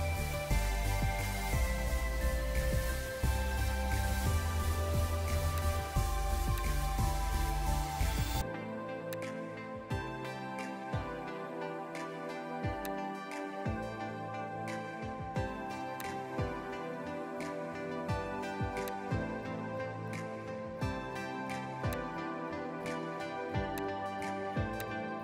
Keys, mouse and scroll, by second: 12.8 shift+click, 20.2 right click, 21.2 Escape, 22.8 right click.